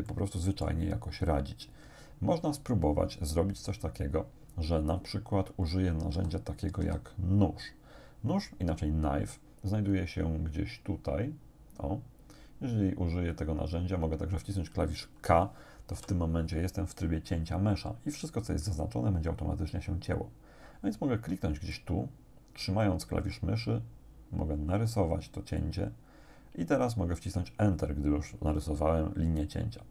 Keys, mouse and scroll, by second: 0.1 click, 6.1 a, 9.8-10.1 scroll down 2, 10.3-10.7 scroll down 2, 16.0 k, 21.7-25.8 drag.